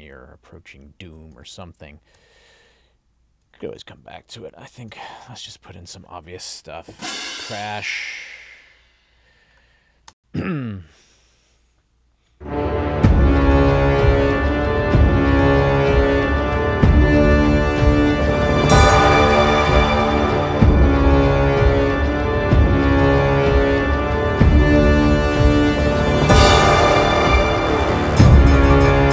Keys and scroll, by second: 1.4 Down, 2.2 Up, 3.5 Down, 10.2 space.